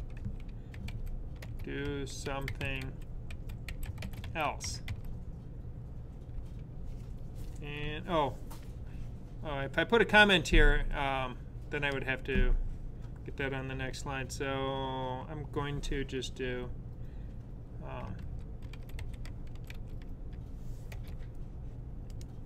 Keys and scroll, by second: 0.0-5.1 typing, 17.7-20.9 typing.